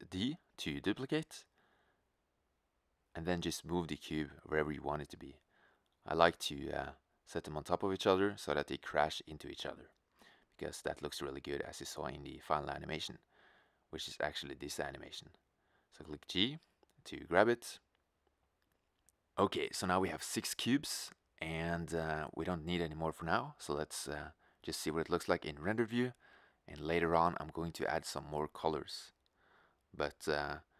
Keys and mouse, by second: 0.1 shift+d, 2.6 middle click, 4.1-5.8 middle drag, 4.6 shift+d, 7.0 shift+d, 10.3 shift+d, 13.1 shift+d, 15.4 g, 17.6 middle click, 17.8 middle click, 21.7-25.1 middle drag, 25.1 shift+z, 30.0 shift+z.